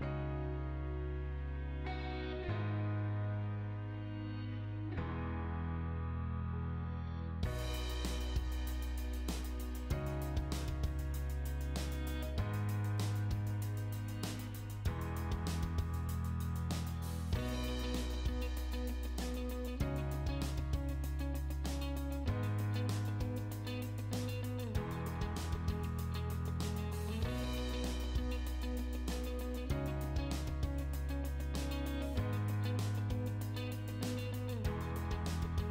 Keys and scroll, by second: 6.3 p, 6.7 space, 9.2 Escape, 12.2 p, 12.6 space, 15.4 1, 18.1 BackSpace, 19.3 2, 19.9 ', 20.6 Return, 21.6 space, 26.2 o, 26.4 space, 27.6 3, 27.8 Return, 30.6 space, 33.7 space, 34.1 1, 34.3 Return.